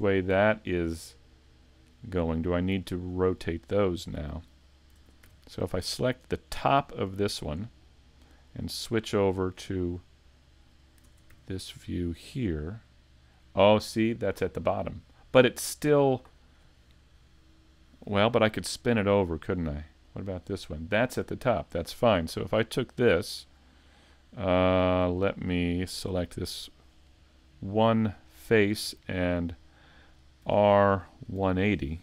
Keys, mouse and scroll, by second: 2.2 middle click, 6.5 ctrl+Tab, 6.5 right click, 6.5 scroll up 2, 11.3 click, 12.2 right click, 15.3 shift+middle click, 26.0 click, 26.6 right click.